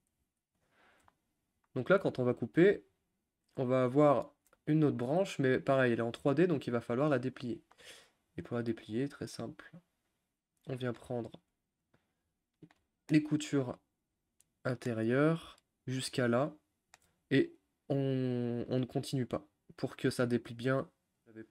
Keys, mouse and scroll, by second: 0.6 u, 1.1-10.6 shift+middle drag, 10.6 click, 10.9-11.9 middle drag, 11.9 shift+click, 12.6-13.9 middle drag, 13.9-14.5 scroll up 1, 14.5-16.0 middle drag, 16.0 ctrl+click, 16.4-21.5 middle drag.